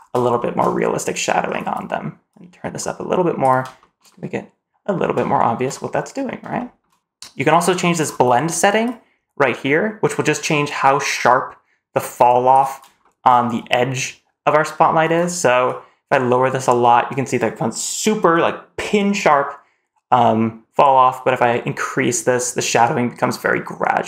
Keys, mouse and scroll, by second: 0.2 shift+middle click, 0.5 middle click, 1.3-2.1 scroll down 1, 2.1-3.2 drag, 3.6 shift+middle click, 3.9-4.8 middle drag, 5.2 shift+middle drag, 5.7-6.2 scroll down 1, 6.4 shift+middle click, 6.9 scroll down 2, 7.2 scroll up 1, 7.5 shift+middle drag, 7.8-8.7 scroll up 1, 8.7-12.4 drag, 12.8 shift+middle drag, 13.1-15.5 scroll up 1, 15.5-24.0 drag.